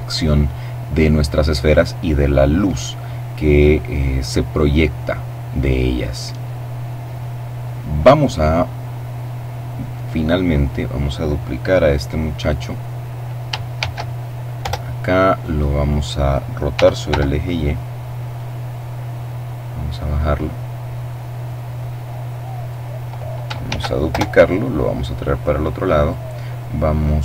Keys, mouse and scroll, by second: 8.4 middle click, 9.6 right click, 12.9 shift+d, 13.7 Return, 14.5-15.9 drag, 15.8 r, 16.1 y, 17.4 click, 18.2-22.3 drag, 22.7 shift+d, 23.1 shift+Return, 23.8-25.6 drag.